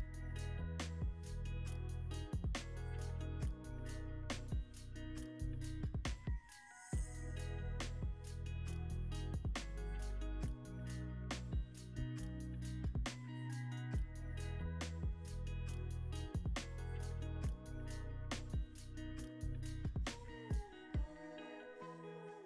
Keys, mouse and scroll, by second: 9.3 scroll up 1, 15.7 click, 18.8 m, 20.1-20.9 typing, 20.9 Return.